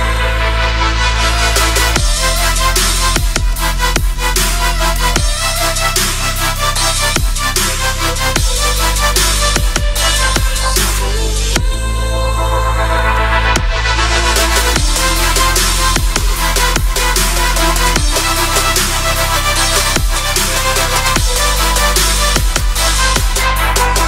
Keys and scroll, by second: 2.9 g, 23.8 c.